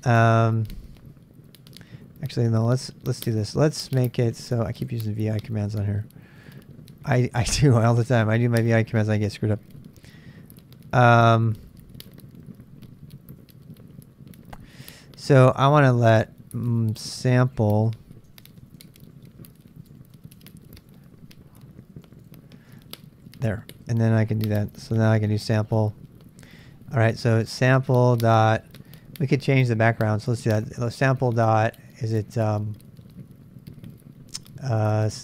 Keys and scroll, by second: 0.0-2.0 typing, 1.7 ctrl+[, 5.8 Up, 6.4 Up, 8.5 Up, 10.0 Up, 11.2 Down, 13.4 Up, 14.5-15.5 Left, 17.0 Right, 17.3-25.5 typing, 21.3 Down, 27.1-28.6 typing, 34.9-35.2 typing.